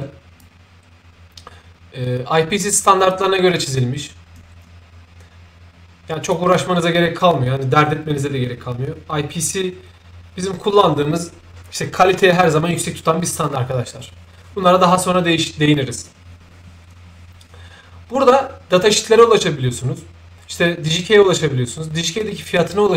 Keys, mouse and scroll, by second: 0.4-6.3 shift+drag.